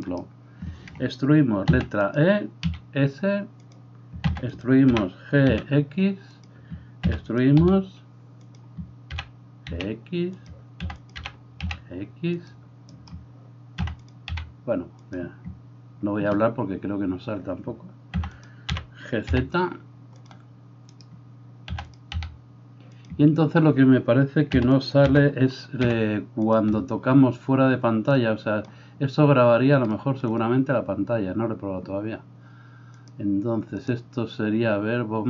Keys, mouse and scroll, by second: 1.7 e, 2.2-13.0 middle drag, 2.7 s, 4.3 e, 5.0 g, 7.1 e, 7.6 s, 9.1 g, 10.9 e, 11.2 g, 13.0 right click, 13.9-28.1 middle drag, 13.9 e, 14.3 s, 18.2 e, 18.7 g, 21.8 e, 22.1 s, 24.6 e, 25.1 g, 28.1-35.2 drag.